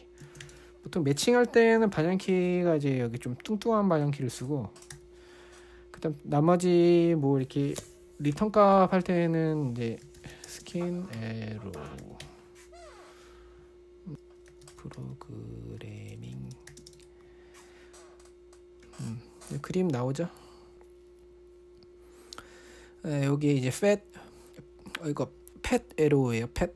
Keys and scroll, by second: 0.0-1.3 typing, 5.3 typing, 10.2-17.6 typing.